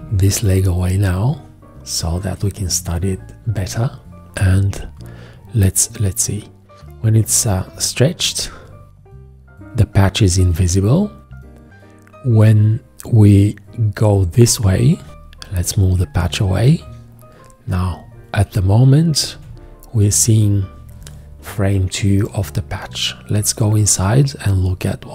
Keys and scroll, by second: 15.1 v, 19.4 v.